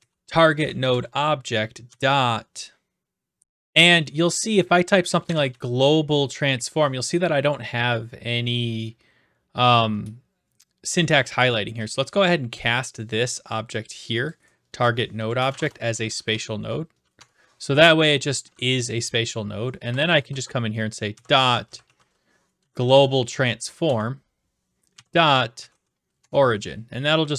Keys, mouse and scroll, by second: 0.0-2.4 typing, 0.9 Return, 3.4 typing, 5.0-6.2 typing, 11.9 click, 14.3 click, 15.4-16.9 typing, 17.1 Tab, 19.3 click, 19.8-22.4 typing, 22.6 Down, 22.7 Down, 22.9 Down, 23.8 Return, 25.6-26.3 typing.